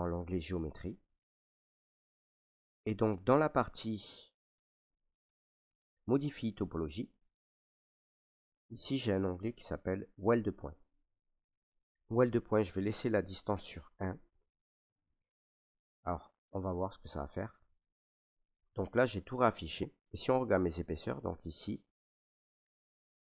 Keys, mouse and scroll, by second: 6.5 click, 7.0 click, 17.7 right click, 18.6 right click, 20.2 ctrl+right click, 20.3 ctrl+right click, 20.8 alt+right click, 21.8 ctrl+right click, 22.4 alt+right click.